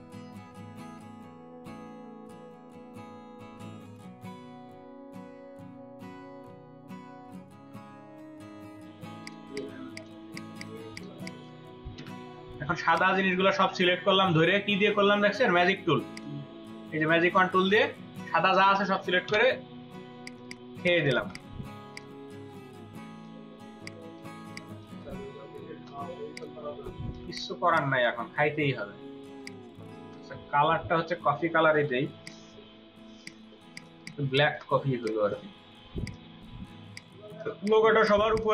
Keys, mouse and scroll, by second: 2.0 double click, 2.3 Delete, 2.5 ctrl+z, 2.9 double click, 3.2 right click, 3.7 double click, 4.0 Delete, 4.3 space, 4.9 ctrl+g, 5.0 space, 6.5 space, 6.9 space, 9.1 ctrl+space, 9.5 ctrl+double click, 10.9 ctrl+click, 11.1 ctrl+space, 11.9 y, 16.1 right click, 19.3 Delete, 20.1 ctrl+space, 20.3 ctrl+alt+click, 20.3 ctrl+alt+double click, 20.7 ctrl+alt+click, 20.9 ctrl+alt+click, 21.7 typing, 23.1 ctrl+2, 24.3-25.9 typing, 27.1 typing, 27.7 double click, 29.1 space, 29.7 space, 30.9-31.7 scroll down 1, 31.7 typing, 33.1 typing, 33.5 ctrl+space, 33.7 ctrl+click, 33.9 ctrl+double click, 34.1 ctrl+space, 37.7 space, 37.9 double click, 38.3 ctrl+click.